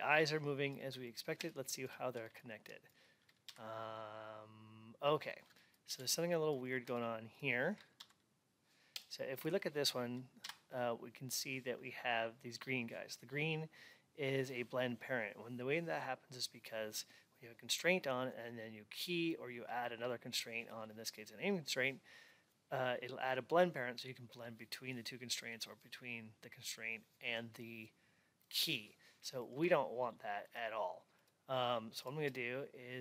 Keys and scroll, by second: 3.4 Up, 5.8 alt+x, 7.9 Up.